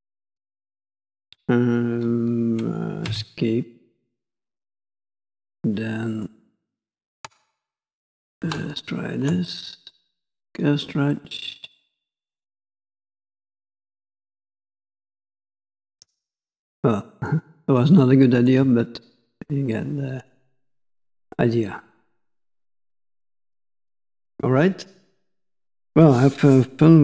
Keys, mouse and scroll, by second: 4.1 click, 5.6 middle click, 8.7 ctrl+click, 9.5 middle click, 10.5 click, 11.2 middle click, 15.3 middle click, 16.8 middle click, 17.3 scroll up 1, 18.1 shift+middle click, 20.6 middle click, 23.3 middle click.